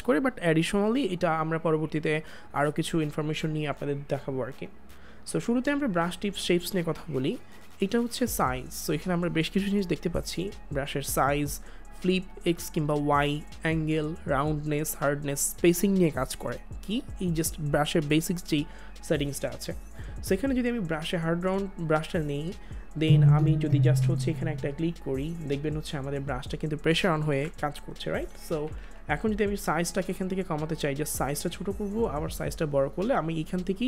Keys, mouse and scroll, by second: 27.3 ctrl+z, 28.3 [, 30.3 click.